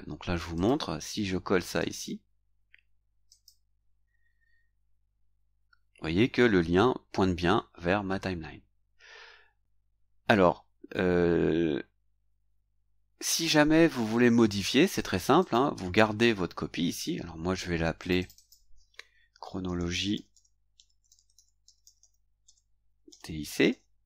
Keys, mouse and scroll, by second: 0.5 click, 1.6 right click, 3.2 click, 15.4 click, 18.0 click, 19.4-24.0 typing.